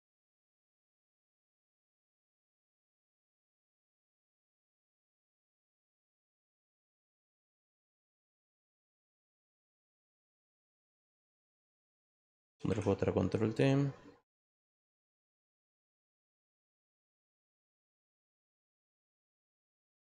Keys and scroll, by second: 12.4 ctrl+j, 19.8 Return.